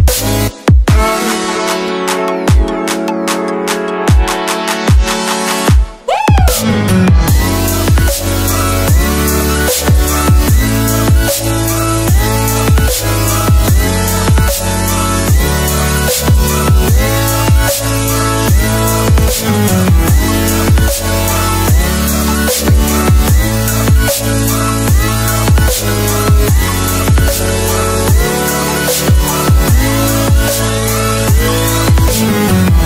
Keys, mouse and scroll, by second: 10.1 ctrl+Num_Lock, 10.3 click, 11.7 d, 17.9 ctrl+Num_Lock, 18.4 ctrl+z, 20.1 click, 20.8 Delete, 22.1 click, 30.0 Tab, 31.1 click.